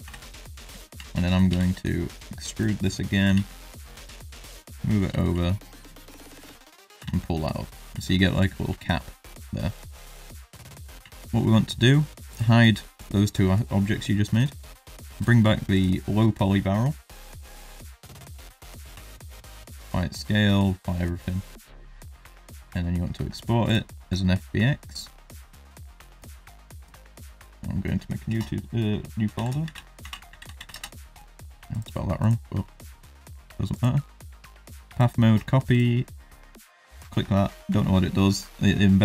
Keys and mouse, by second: 0.0 KP_7, 0.8 shift+middle click, 3.2 g, 4.7 middle click, 5.2 shift+middle click, 6.3 e, 6.9 Tab, 7.3-7.6 middle drag, 7.9 shift+middle drag, 8.1-8.5 middle drag, 8.7 shift+middle click, 9.2 click, 9.4 middle drag, 9.9 shift+middle drag, 10.5-10.8 middle drag, 11.0 shift+middle drag, 12.2 click, 12.9-14.5 drag, 15.1 click, 16.0 middle drag, 18.9 ctrl+a, 21.4-23.8 drag.